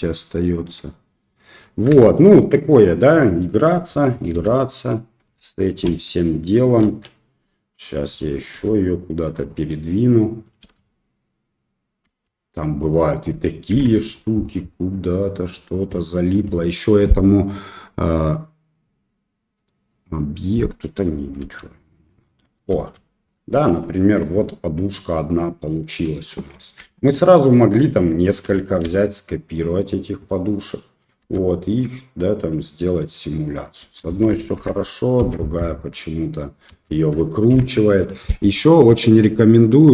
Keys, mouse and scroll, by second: 0.5-1.5 drag, 1.9 shift+middle click, 2.7 click, 3.1 middle click, 3.8 middle drag, 4.3 s, 5.8 KP_3, 6.8 KP_1, 8.5 g, 9.6 middle drag, 10.2 middle drag, 10.5 space, 12.1 space, 12.2-12.9 middle drag, 13.7 shift+Left, 14.8 click, 15.1 click, 15.7 middle click, 16.2 click, 20.5 middle click, 21.4 space, 22.7 space, 23.3-23.7 middle drag, 23.9 middle drag, 24.4-25.3 middle drag, 25.3 click, 26.8 ctrl+z, 27.1-27.4 middle drag, 28.4 shift+d, 30.5-31.0 middle drag, 31.2 space, 33.4 middle click, 33.8 space, 34.5 shift+Left, 35.1 space, 35.9 click, 35.9 right click, 36.5-37.9 middle drag, 36.7 space, 37.5 shift+Left.